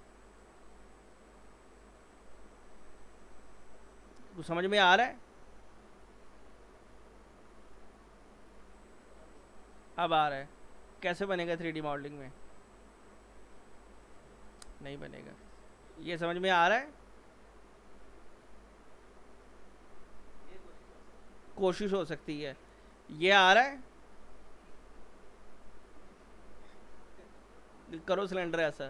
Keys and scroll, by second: 0.8 Return.